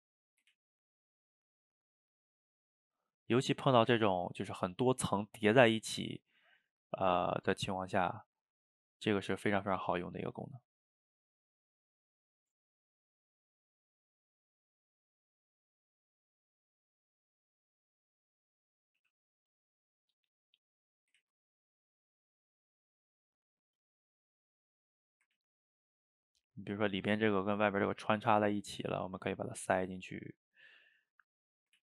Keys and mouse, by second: 0.1 middle click, 0.6 ctrl+z, 1.2 click, 1.7 middle click, 2.4 click, 3.3-4.4 middle drag, 4.4-6.4 drag, 6.4 middle click, 6.8 click, 7.5 f, 7.9 middle click, 8.4-9.5 drag, 9.5 ctrl+z, 10.0 f, 10.4 middle click, 10.9-12.5 drag, 12.5 middle click, 13.2 click, 13.6 middle click, 14.3 click, 14.7 middle click, 15.5-18.6 drag, 18.6 middle click, 19.0 f, 19.5 middle click, 20.1 click, 20.7 middle click, 21.2 ctrl+z, 21.4 middle click, 22.1 click, 22.6 middle click, 23.2-25.0 drag, 25.0 middle click, 25.4 ctrl+z, 25.8 click, 26.8 middle click, 27.6-29.9 drag, 29.9 middle click, 30.8-31.8 drag.